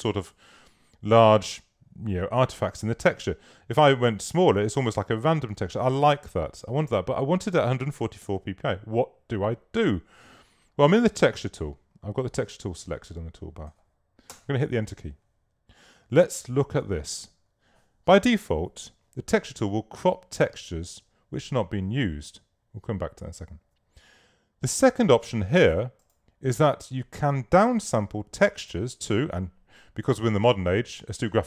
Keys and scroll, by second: 14.4 Return.